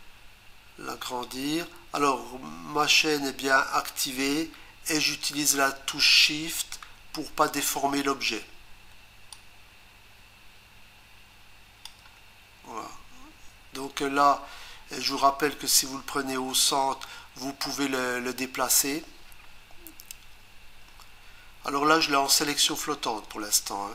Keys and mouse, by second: 9.3 shift+click.